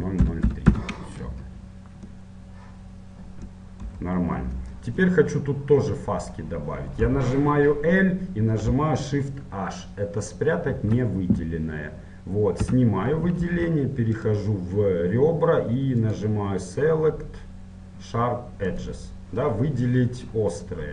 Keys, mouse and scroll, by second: 0.8 KP_0, 2.3 middle click, 3.5 middle click, 4.0 KP_1, 4.8-7.2 middle drag, 7.2 l, 10.9 shift+h, 12.8 a, 14.4 ctrl+Tab.